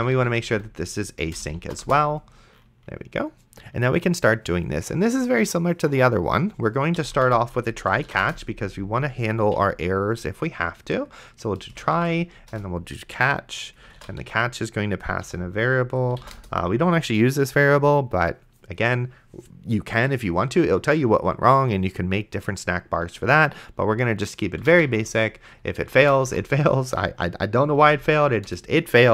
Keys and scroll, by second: 0.0-1.2 typing, 1.8 Return, 6.9-7.9 typing, 8.2 Return, 9.5 Down, 11.4-12.7 typing, 13.8 space, 14.2 e, 15.2 End, 16.0 space, 16.4 Return, 24.5-26.5 typing, 27.6 Down, 28.5 Return.